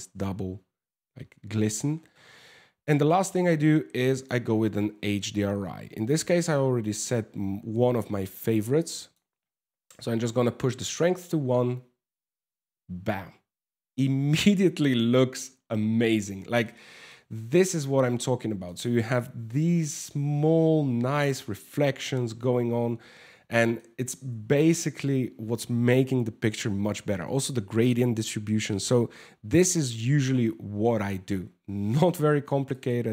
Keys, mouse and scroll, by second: 3.7 click, 7.5 click, 11.2 scroll up 1, 16.2 shift+middle click, 16.9 scroll up 6, 18.0 shift+middle click, 22.5 scroll down 4, 23.1 shift+middle click, 23.6 scroll down 2, 24.1 shift+middle click, 24.5 scroll up 1, 31.5 click.